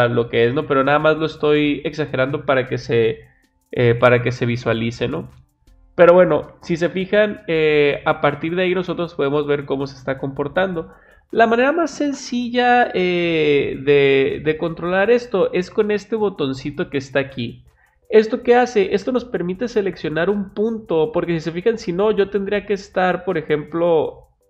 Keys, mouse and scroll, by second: 3.3-3.8 drag, 22.7-24.4 drag.